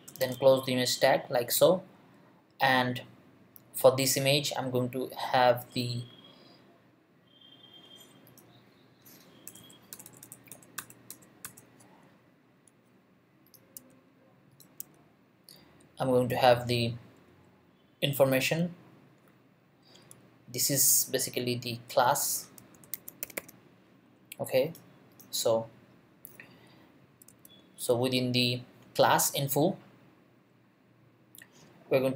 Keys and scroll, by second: 0.2 shift+., 9.5 BackSpace, 13.7 Tab, 17.3 Return, 22.4-23.7 typing, 27.3 Tab.